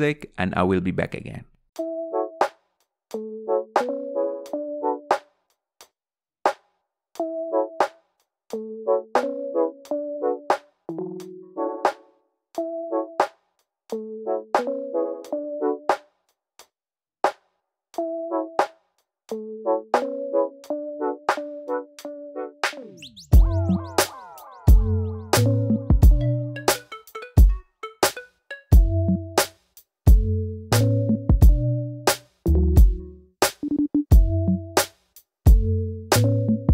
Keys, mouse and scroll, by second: 0.7 click, 1.7 g, 2.5 click, 2.6 g, 3.2 click, 3.4 g, 3.8 click, 3.9 g, 4.5-6.0 middle drag, 6.0 scroll up 1, 6.2 middle click, 7.0 click, 7.2 middle click, 7.3 g, 8.3 click, 8.4 g, 8.9 click, 9.1 g, 9.3-10.5 middle drag, 10.5 click, 10.6 g, 11.2 middle click, 11.5 click, 11.7 g, 12.2 middle click, 12.5 click, 12.7 middle click, 13.1 click, 13.7-15.2 middle drag, 15.3 click, 15.6 click, 16.5 click, 17.0-19.1 middle drag, 19.1 click, 20.1 middle click, 20.4 click, 20.5 g, 21.0 scroll down 2, 21.1 middle click, 21.3 click, 21.7 click, 22.1 middle click, 22.5 g, 23.0 scroll up 2, 23.1 middle click, 23.5 click, 23.6 g, 24.1 middle click, 24.4 click, 24.5 g, 25.0 click, 25.1 g, 25.6 shift+middle click, 25.9 click, 26.0 g, 26.5 middle click, 27.0 click, 27.1 g, 27.8 middle click, 28.4-30.7 typing, 29.3 click, 30.6 click, 31.1 click, 31.6 scroll down 4, 31.7-32.7 middle drag, 32.7 scroll up 1, 32.9 click, 33.0 middle click, 33.4 click, 34.1-35.1 middle drag, 35.1 click, 35.7 g, 36.2 click, 36.3 g.